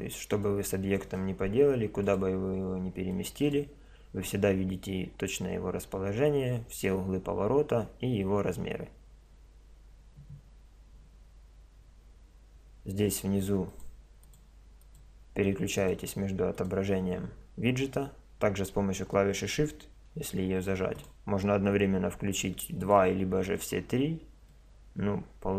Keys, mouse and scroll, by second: 0.4-2.2 drag, 1.6 r, 3.1-4.6 drag, 4.7 drag, 13.7-18.4 drag, 21.0-22.7 drag, 22.8-24.6 drag, 24.6-25.5 middle drag.